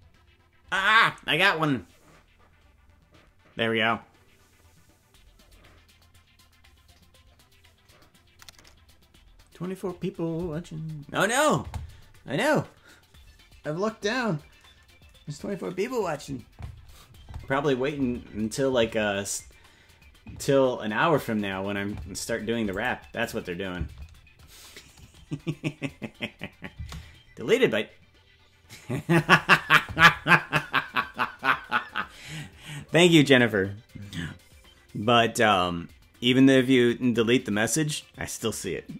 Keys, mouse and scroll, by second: 22.7 click, 23.2 click, 23.7 space, 28.3 space.